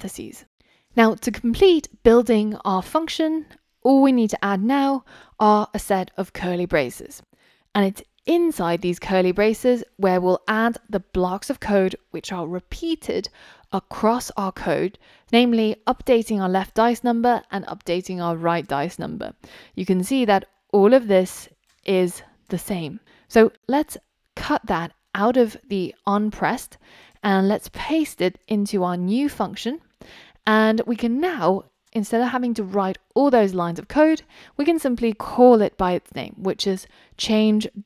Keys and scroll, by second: 24.5 super+x, 28.4 super+v, 36.8 Return.